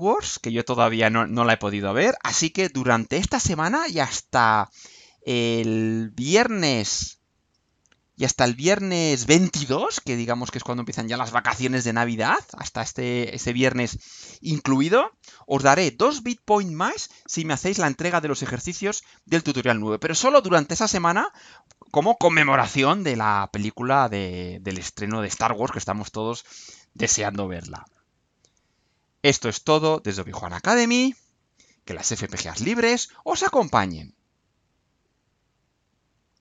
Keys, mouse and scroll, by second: 5.8 click, 12.4 click, 15.0-21.3 drag, 35.2 click.